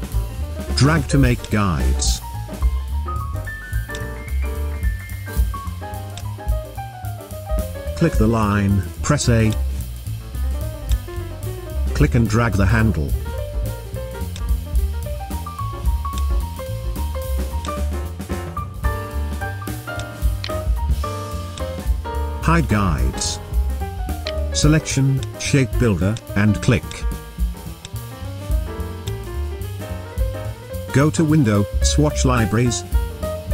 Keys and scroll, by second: 9.7 a, 21.5 v, 29.6 v.